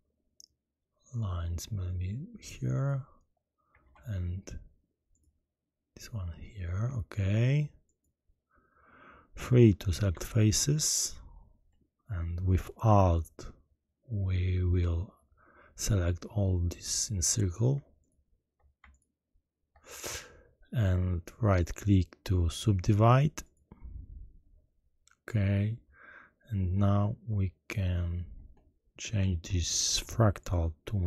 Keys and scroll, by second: 3.8 ctrl+r.